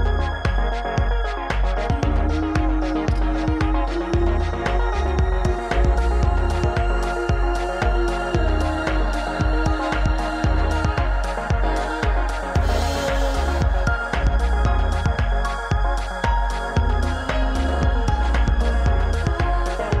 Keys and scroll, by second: 2.2 ctrl+j, 5.0 KP_1, 5.4 KP_9, 9.2 ctrl+z, 9.4 ctrl+z.